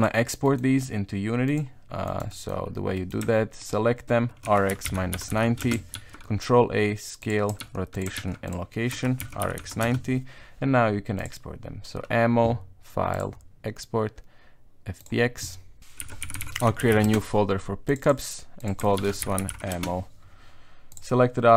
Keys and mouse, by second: 0.0 click, 0.0 m, 0.4 middle click, 1.4 click, 2.0 right click, 2.3 middle click, 2.9 middle click, 3.6 shift+right click, 4.4 r, 5.9 ctrl+a, 7.6 ctrl+a, 8.9 r, 13.2-15.1 drag.